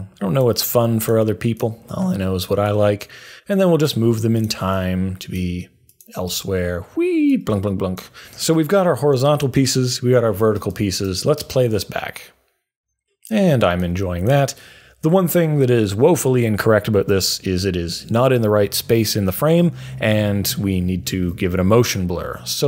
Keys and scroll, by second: 21.1 super+a.